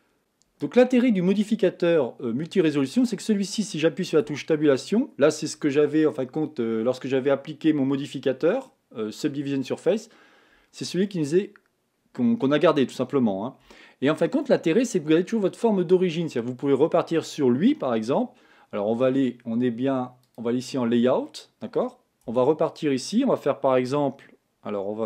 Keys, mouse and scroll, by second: 0.2 Tab, 3.0 middle click, 3.7-4.5 scroll up 1, 4.5 Tab, 4.7-15.5 middle drag, 15.5-16.3 scroll up 1, 16.3 middle click, 17.2-20.3 scroll up 1, 20.4 click, 21.2-22.4 middle drag, 22.4 Tab.